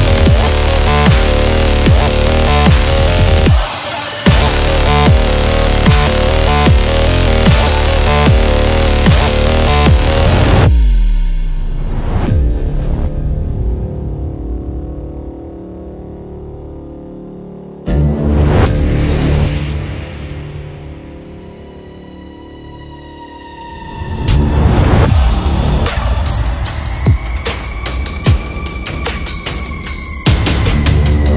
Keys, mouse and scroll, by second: 0.3 ctrl+t, 0.9-5.1 drag, 5.1 Return, 6.0-8.5 drag, 13.6-15.8 drag, 15.8 ctrl+t, 16.4 click, 16.6-18.1 drag, 18.1 Return, 19.4 click, 20.2-23.0 typing, 23.3-28.4 drag, 28.7 Right, 30.3 ctrl+t, 31.0 click.